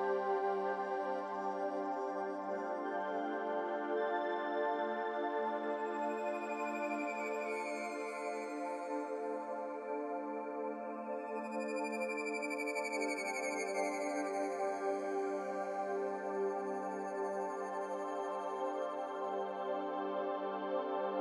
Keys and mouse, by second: 2.9-4.0 drag, 5.1 click, 8.6-10.3 drag, 14.5 click, 19.0 click, 20.3 click.